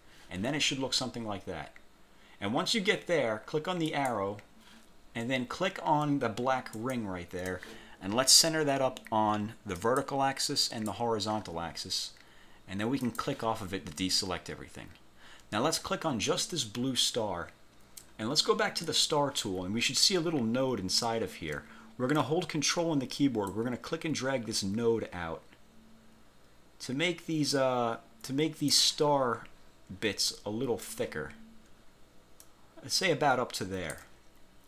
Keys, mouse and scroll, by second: 4.0 click, 6.9 shift+click, 9.9 click, 10.7 click, 11.8 scroll up 2, 13.1 click, 16.3 click, 18.9 click, 23.7-29.1 ctrl+drag, 32.5-34.3 ctrl+drag.